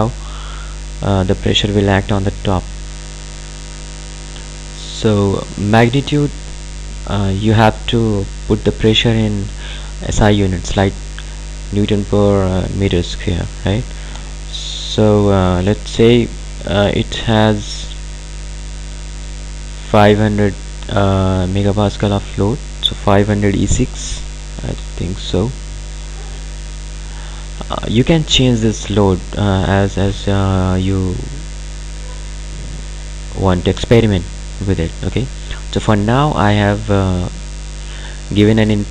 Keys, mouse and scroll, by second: 5.3 click, 24.3-25.3 typing.